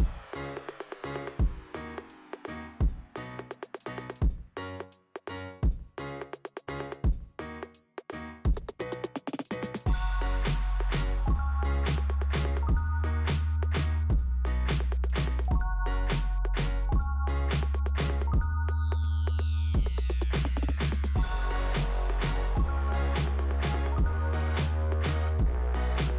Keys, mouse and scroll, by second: 1.3 click, 2.3 click, 8.0 click, 8.0 click, 9.7 scroll up 2, 10.4 click, 10.4 click, 10.5 click, 10.6 double click, 21.0 scroll up 2, 25.9-26.1 scroll down 2.